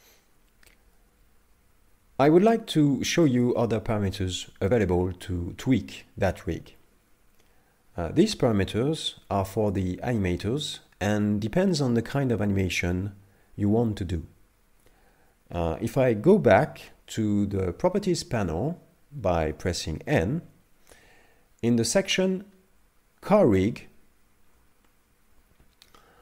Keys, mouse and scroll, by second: 19.5 n, 22.3-22.6 scroll down 4, 25.5 a.